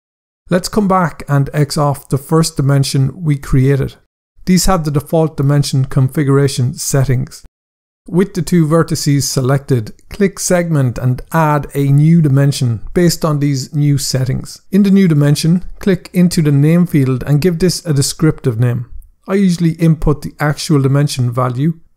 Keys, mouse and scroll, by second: 1.7 click, 10.7 click, 13.8 scroll down 1, 15.5 click.